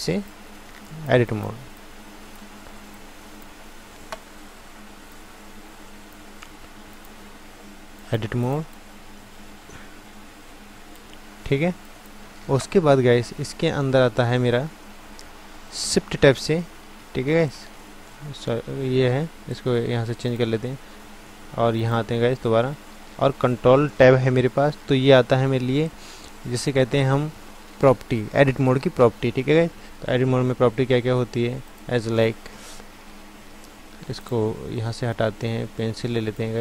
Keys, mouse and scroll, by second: 21.8-23.7 drag, 22.7 ctrl+Tab.